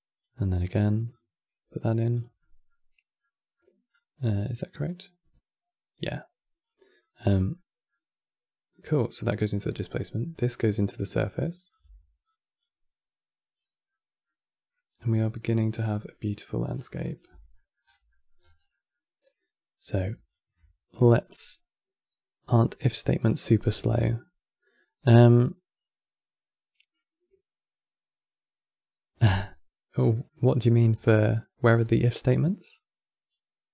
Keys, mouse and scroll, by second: 2.1-3.6 middle drag, 3.6 click, 6.7 click, 7.2-8.4 middle drag, 8.4 click, 9.0-10.1 middle drag, 10.1 click, 11.4 click, 11.6 x, 11.9 click, 12.7-13.3 scroll up 3, 13.6 scroll down 2, 13.6-16.5 middle drag, 16.5 scroll down 3, 16.8 click, 17.0 x, 17.2 middle click, 17.6 scroll down 4, 17.8 middle click, 18.1-18.4 scroll up 10, 18.4-21.5 middle drag, 22.9 scroll down 4, 23.2-26.3 middle drag, 29.7 middle click, 30.6-31.4 scroll up 6, 31.4 scroll down 4, 31.7-32.4 middle drag, 32.4 click, 33.5 click.